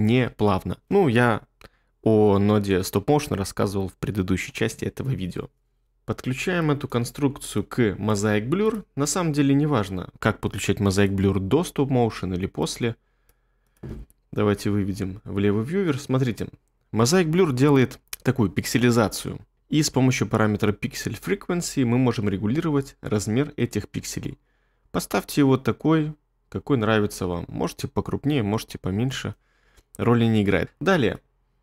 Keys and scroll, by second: 0.3 space, 14.6 1.